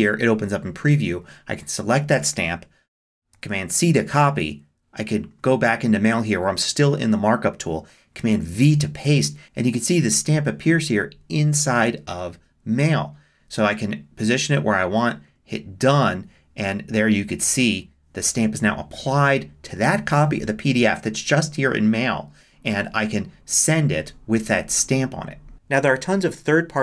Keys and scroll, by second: 3.3 super+c, 8.2 super+v.